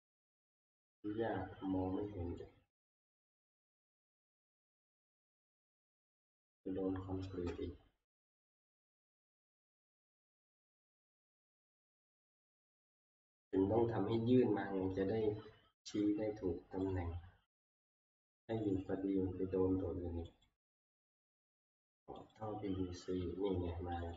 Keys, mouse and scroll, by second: 0.7 middle click, 3.5 click, 3.5 scroll, 4.2 click, 6.0 click, 6.6-7.3 scroll, 9.0 click, 10.2 click, 13.5 click, 14.5-16.4 scroll, 16.9 click, 17.6 click, 18.7 click, 18.8 click, 20.5 middle click, 20.5 click, 22.3 click, 24.1 click.